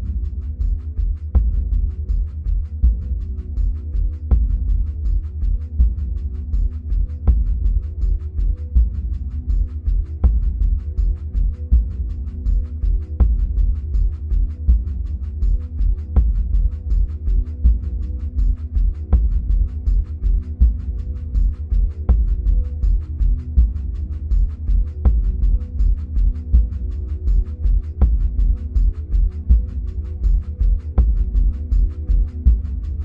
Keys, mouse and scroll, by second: 3.1-4.2 middle drag, 4.2-5.1 scroll up 2, 5.1-7.6 drag, 7.6-8.9 middle drag, 8.9-10.2 scroll down 2, 10.2-16.8 middle drag, 11.4-13.3 scroll up 2, 13.3-14.5 scroll up 1, 16.8 click, 22.5-25.4 middle drag, 25.4 click.